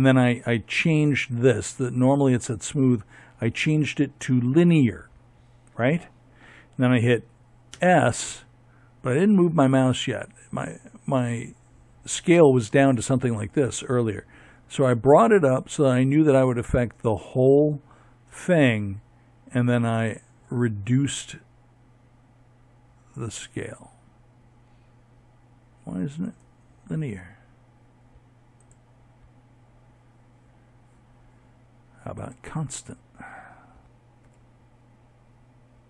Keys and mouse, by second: 0.7 click, 5.7 s, 26.2-28.7 drag, 32.2 s.